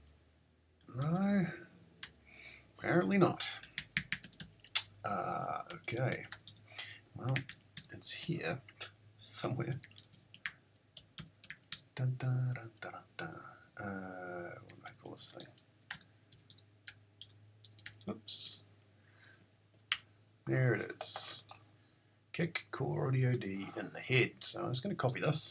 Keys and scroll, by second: 0.0-0.3 typing, 0.8 Up, 2.0 Return, 3.4-8.0 typing, 9.6-11.5 typing, 11.7 Tab, 14.4-15.7 typing, 16.5 Tab, 16.9-18.5 typing, 19.9 Return.